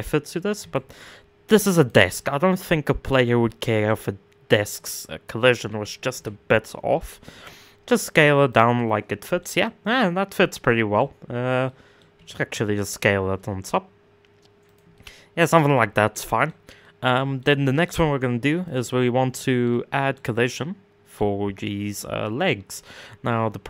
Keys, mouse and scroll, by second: 0.2 s, 1.7-5.3 middle drag, 5.3 s, 8.3-9.7 middle drag, 9.7-10.1 scroll up 3, 10.1-11.7 middle drag, 11.7 s, 14.5 middle click, 15.3 scroll up 1, 15.4-15.7 scroll down 3, 15.7 middle click, 16.1 scroll down 1, 16.4-18.3 middle drag, 18.3 click, 18.9-19.8 middle drag, 19.8-20.1 scroll up 1, 20.1-23.6 middle drag.